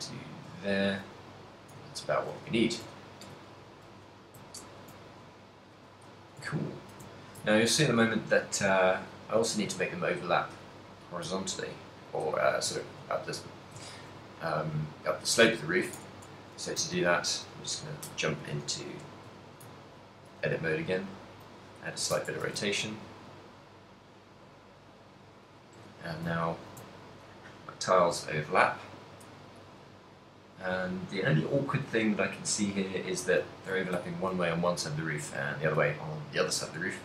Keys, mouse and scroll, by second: 0.0 middle click, 0.7 ctrl+middle click, 1.2 middle click, 1.9 ctrl+middle click, 2.9 KP_1, 3.5 shift+middle click, 4.0 z, 4.8 shift+middle click, 5.0 shift+middle click, 5.5 middle click, 5.8 z, 6.2 shift+middle click, 6.7 ctrl+middle click, 7.3 shift+middle click, 7.6 ctrl+middle click, 8.4 middle click, 9.6 middle click, 10.3 right click, 14.0 ctrl+middle click, 15.0 middle click, 16.1 Tab, 16.9 a, 17.2 a, 18.6 KP_3, 19.0 z, 19.4 shift+middle click, 19.8 ctrl+middle click, 20.8 r, 22.0 click, 22.2 Tab, 22.5 z, 22.7 ctrl+middle click, 23.1 middle click, 24.3 middle click, 26.0 shift+middle click, 26.2 shift+middle click, 26.4 ctrl+middle click, 27.0 shift+middle click, 28.8 middle click, 29.4 ctrl+middle click, 29.9 middle click, 31.2 middle click, 32.4 middle click, 33.7 ctrl+middle click, 34.0 ctrl+middle click, 34.1 shift+middle click.